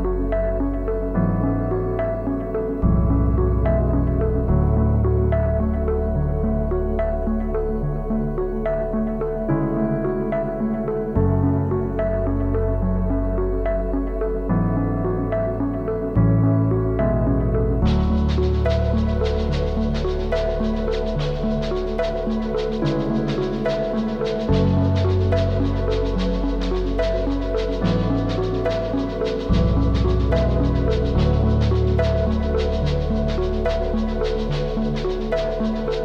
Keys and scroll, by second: 3.1-4.0 typing.